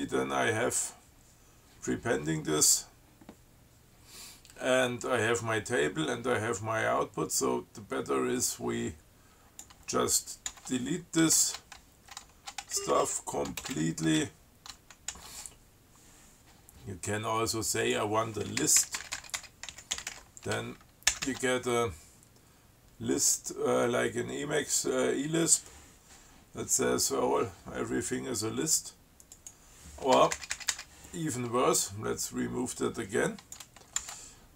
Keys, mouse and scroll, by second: 8.6-10.1 drag, 10.8 ctrl+w, 13.0 ctrl+shift+Down, 13.9 ctrl+space, 14.0 ctrl+Down, 15.4 ctrl+w, 18.1 click, 18.9-20.9 typing, 21.4 ctrl+c, 29.6 click, 30.4 BackSpace, 33.0 click, 34.3 ctrl+w.